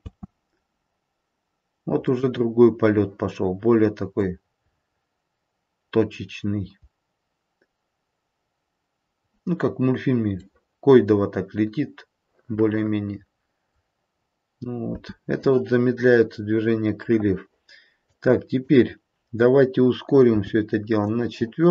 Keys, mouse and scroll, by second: 0.0 space, 1.9 middle click, 4.0 middle click, 4.6-5.1 scroll up 3, 5.8-7.8 scroll down 1, 9.2-10.0 scroll down 1, 10.6 middle click, 10.6-11.4 scroll down 2, 14.9 space, 20.3 click, 20.3 g.